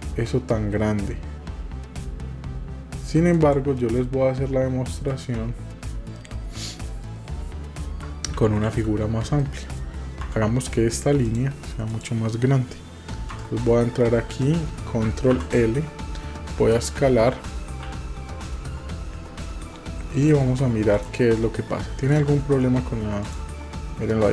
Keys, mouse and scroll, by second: 3.4 click, 4.9 middle click, 6.8-8.0 middle drag, 8.3 ctrl+z, 9.4 middle click, 10.3 Tab, 11.3 click, 11.9 click, 15.3 ctrl+l, 17.9 s, 20.1 click, 20.9 click, 22.1 click.